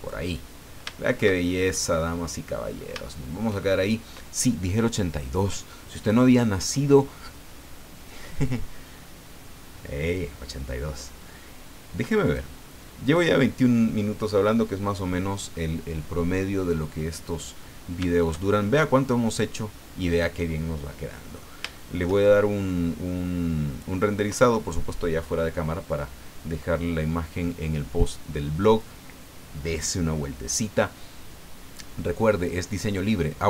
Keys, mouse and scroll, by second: 0.6-0.9 scroll down 1, 0.9 shift+middle click, 2.0 shift+middle click, 2.7-3.1 scroll up 1, 3.1 shift+middle click, 12.2 click, 13.0 click, 17.6 scroll down 2, 18.1-21.6 shift+middle drag, 21.7 shift+middle click, 22.6 middle click.